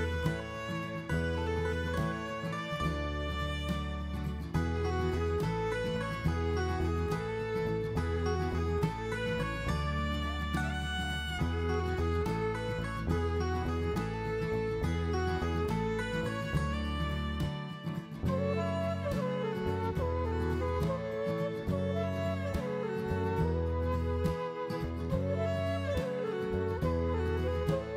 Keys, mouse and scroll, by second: 1.1 shift+a, 4.0 r, 6.4 middle click, 7.5 KP_1, 8.1-9.1 scroll up 1, 9.1 scroll up 2, 9.1 s, 12.6 Tab, 14.8 ctrl+r, 21.0-21.3 scroll up 1, 22.5-24.0 scroll up 1, 22.5 s, 26.3-26.6 scroll up 1.